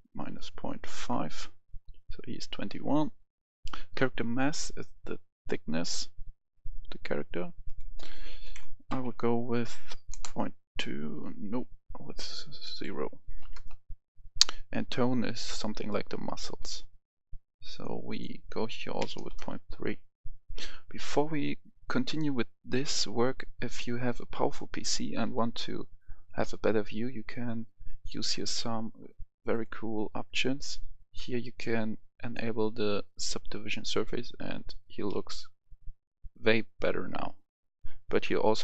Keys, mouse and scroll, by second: 0.2 5, 0.9 Return, 4.5-7.6 drag, 9.0 2, 10.1 Return, 12.7 click, 13.4 0, 13.5 Return, 15.5-18.0 drag, 19.2 3, 19.4 Return, 23.1-24.0 scroll up 1, 24.0-26.3 scroll down 1, 29.5 click, 35.0-38.2 middle drag.